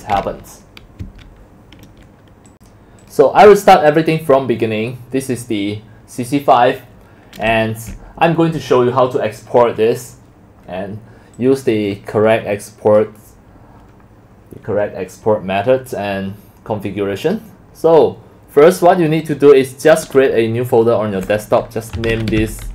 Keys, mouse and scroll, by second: 1.0 Escape, 2.5 click, 3.0 click, 3.9 click, 4.4 click, 7.5-9.1 typing, 11.1-12.5 typing, 11.6 scroll up 1, 11.8 click, 12.0 click, 21.8-22.7 typing.